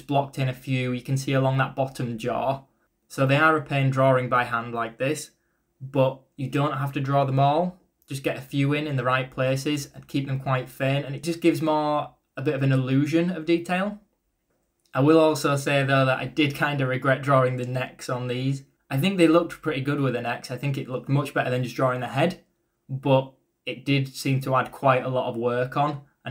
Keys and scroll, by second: 0.1-1.3 typing, 2.8 b, 4.3-5.9 typing, 8.6 ctrl+z, 9.4 b, 11.3-12.2 typing, 14.0-18.4 typing, 24.7-25.6 typing.